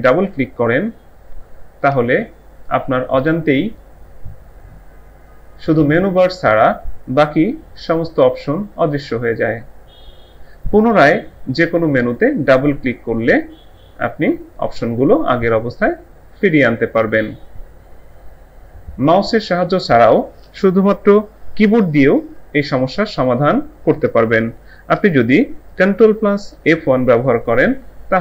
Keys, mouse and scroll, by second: 0.1 click, 0.3 double click, 12.1 click, 12.2 double click, 26.6 ctrl+F1.